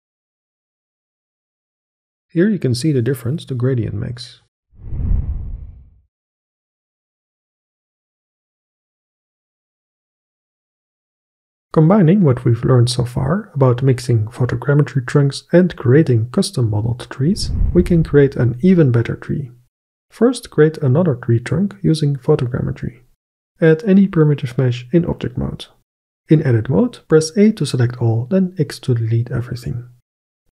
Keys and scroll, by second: 22.9 n, 23.6 shift+a, 26.4 Tab, 27.3 a, 28.6 x.